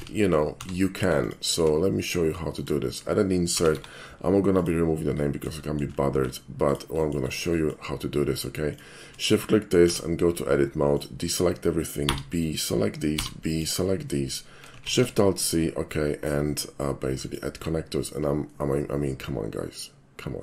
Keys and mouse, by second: 0.0 ctrl+z, 1.2 alt+click, 2.6 alt+click, 3.6 g, 3.8 y, 4.6 click, 5.2 middle drag, 5.7 shift+middle drag, 6.2 s, 6.7 click, 7.1 middle click, 7.6 shift+middle click, 8.7 shift+click, 9.9 Tab, 10.9 click, 12.1 b, 12.5 click, 13.5 click, 14.9 alt+shift+c, 17.2 click, 18.5-20.4 middle drag.